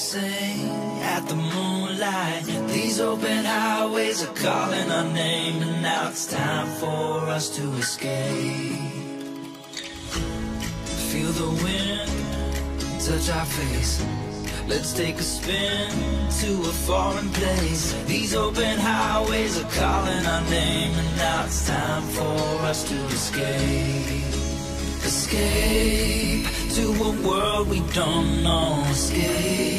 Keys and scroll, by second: 29.3 Tab.